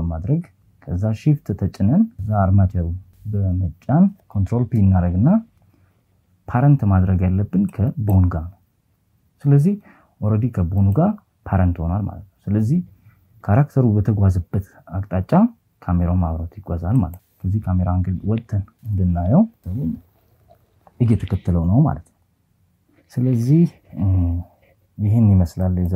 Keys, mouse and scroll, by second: 1.1 shift+right click, 4.9 ctrl+p, 17.5 click, 19.1 KP_7, 20.7 click, 24.9 click, 25.3 KP_0.